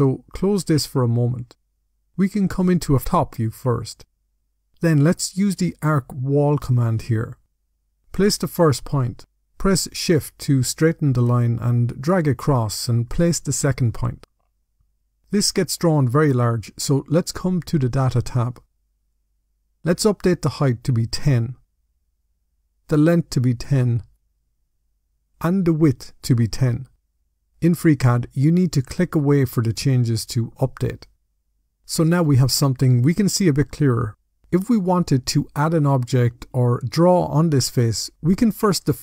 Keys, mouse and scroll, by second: 0.5 click, 2.9 click, 6.0 click, 8.4 click, 13.7-14.1 scroll down 2, 14.1 middle click, 15.5 middle click, 18.1 click, 18.5-20.5 scroll down 17, 20.5 click, 21.0-21.4 typing, 22.6 click, 23.2-23.7 typing, 25.1 click, 25.8-26.3 typing, 28.6 click, 31.2-31.8 scroll up 6, 31.8 middle click, 33.2 middle click.